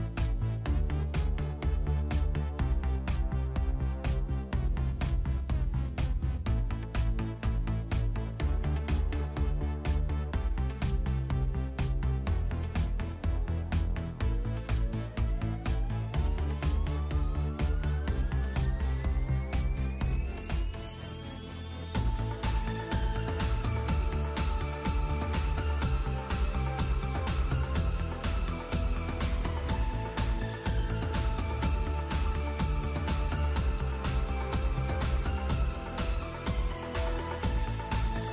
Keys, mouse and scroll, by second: 0.9 click, 3.0 i, 5.3 click, 6.9 click, 7.9 click, 8.5 click, 9.0 click, 10.5 right click, 12.9 s, 16.9 click, 18.0 shift+middle click, 18.4 ctrl+middle click, 19.1 click, 19.6 middle click, 20.1 space, 23.7 space, 25.2 click, 25.9 KP_5, 26.0 KP_3, 26.8 scroll down 3, 27.2 middle click, 27.9 scroll up 1, 28.6 b, 32.6 ctrl+l, 37.7 click.